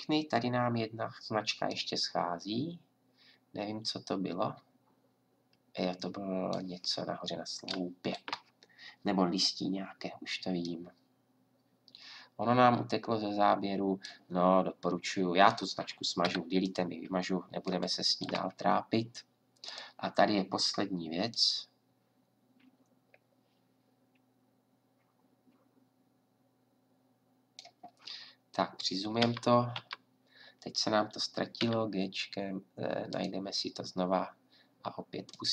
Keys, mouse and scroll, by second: 16.2 Delete, 19.7-21.3 right drag, 23.5-25.8 drag, 26.1 middle click, 26.1 scroll down 1, 29.2 Right, 31.6 g, 35.3-35.5 drag.